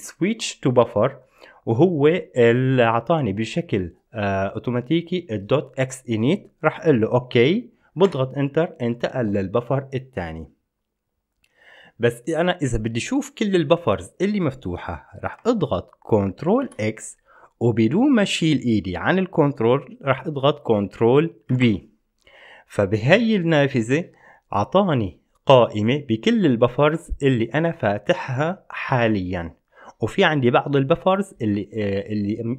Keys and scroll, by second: 8.4 Return, 16.8 ctrl+x, 21.8 ctrl+b.